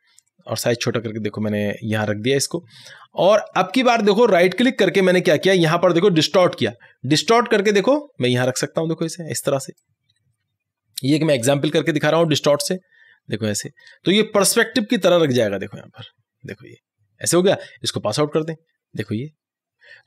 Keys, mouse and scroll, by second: 2.6-4.4 drag, 4.4 right click, 6.4-18.4 drag.